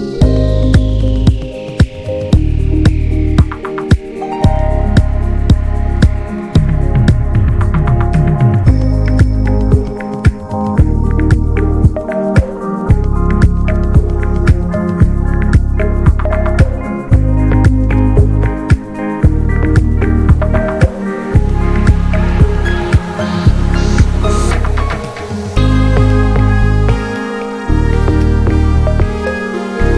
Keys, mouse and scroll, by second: 0.0 click, 0.8 scroll up 1, 1.0-1.9 middle drag, 1.9-2.8 scroll up 2, 2.8 ctrl+s, 3.7 ctrl+s, 4.0-5.4 middle drag, 5.4 click, 7.1 middle click, 7.3 shift+a, 9.6 middle click, 10.3 shift+a, 11.8 shift+a, 13.4 click, 13.6 shift+d, 17.4-19.1 drag, 19.9 middle click, 20.0 scroll up 2, 20.2-20.9 shift+middle drag, 20.9-21.5 scroll up 2, 21.5-22.1 middle drag, 22.1-23.3 scroll up 1, 23.3-27.6 drag, 27.6-28.0 scroll down 3, 28.0-29.5 middle drag, 29.5 scroll up 2, 29.8-29.9 shift+middle drag.